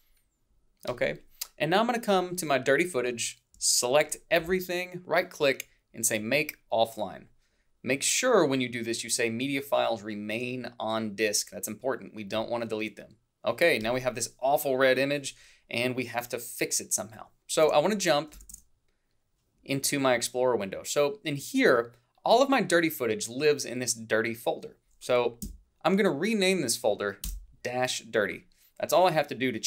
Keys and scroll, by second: 17.7 alt+Tab, 25.5 F2, 27.3 Return.